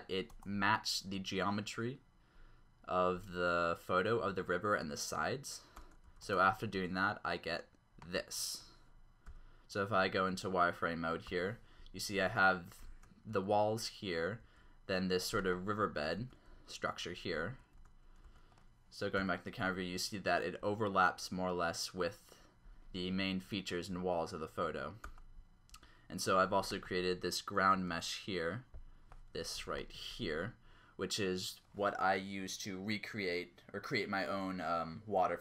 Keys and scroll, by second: 0.3 Return, 5.9 Tab, 6.0 x, 6.3 Return, 9.2 z, 11.2 0, 12.2-13.3 typing, 14.4 typing, 15.8-17.9 typing, 17.8 Tab, 18.3 Tab, 19.2 0, 25.1 Tab, 25.7 Tab, 27.8 Tab, 29.5 a.